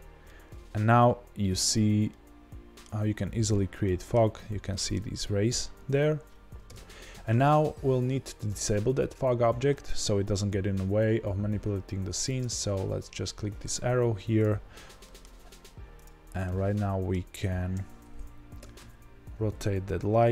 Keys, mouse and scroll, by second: 0.2-6.6 middle drag, 1.6-2.0 scroll down 2, 4.3 scroll up 1, 4.9-5.6 scroll up 2, 5.6 scroll down 1, 6.6 KP_0, 6.8-12.2 middle drag, 12.2 click, 15.0-18.6 middle drag, 16.0 click, 17.3-18.6 scroll up 2, 18.6 r.